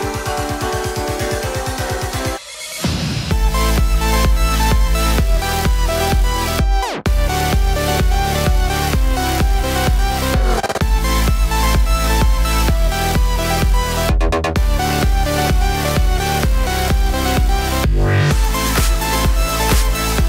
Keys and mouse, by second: 0.0-0.6 typing, 1.1-8.4 middle drag, 1.9 f, 2.2 3, 2.7 i, 7.2 x, 8.0 alt+z, 8.4-12.3 drag, 11.0 alt+z, 11.2 alt+z, 11.5 1, 12.3 middle click, 12.4-14.9 drag, 13.1 alt+z, 13.3 g, 14.9-16.9 middle drag, 16.4 ctrl+z, 16.9 shift+click, 17.4 g, 17.8-20.2 middle drag, 18.9 alt+z, 19.3 alt+3.